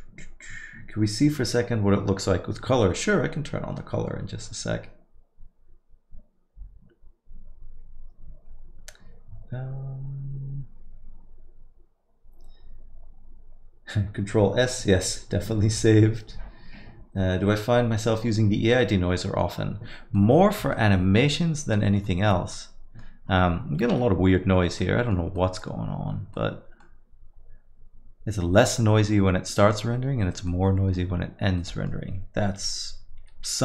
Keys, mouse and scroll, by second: 33.3 Escape.